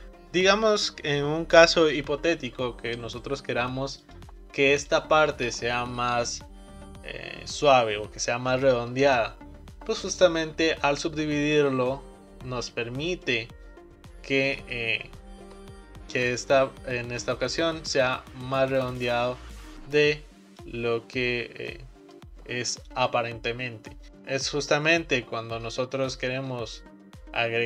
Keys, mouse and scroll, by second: 4.1 click, 4.9 shift+click, 11.5-14.6 right drag, 16.2-19.3 drag, 21.4-21.8 scroll down 2, 21.8-24.1 middle drag.